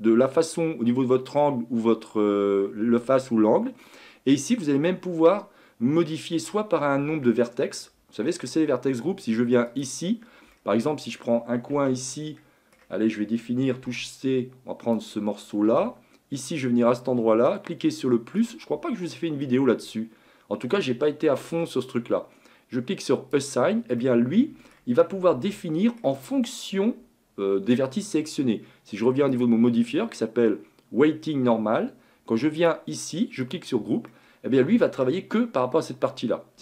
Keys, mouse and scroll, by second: 9.7 click, 10.5-11.7 middle drag, 11.7 Tab, 12.1 middle click, 12.8-13.6 scroll up 1, 13.6 scroll down 2, 13.8 c, 18.4-21.5 drag, 23.1-24.0 drag, 24.0-25.0 middle drag, 25.0-25.3 scroll down 2, 25.3 Tab, 25.5-29.3 middle drag, 29.3 click, 32.6-34.1 drag, 34.1-36.6 middle drag.